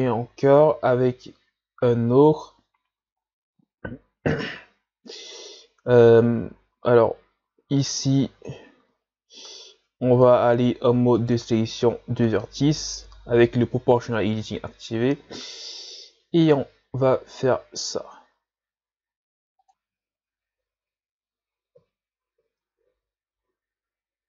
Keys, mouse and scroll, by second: 0.0 shift+scroll up 2, 3.2-3.6 shift+scroll down 1, 6.5-7.0 shift+scroll up 1, 7.0 z, 8.0-8.4 scroll up 1, 8.4 z, 8.8 z, 9.5 ctrl+Tab, 11.2 right click, 13.0 o, 14.4 g, 19.7 x, 22.9 ctrl+z, 23.3 ctrl+z.